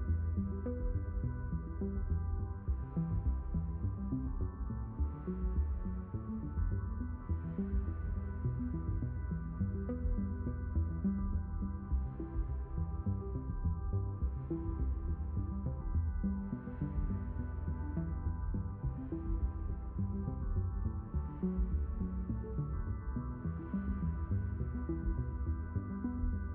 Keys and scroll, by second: 21.1 BackSpace, 25.8 BackSpace.